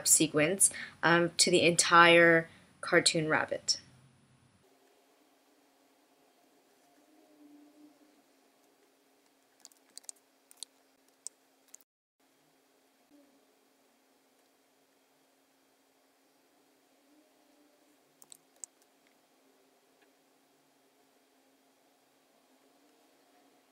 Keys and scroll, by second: 9.9 super+F5, 11.1 super+F9, 18.5 super+F9.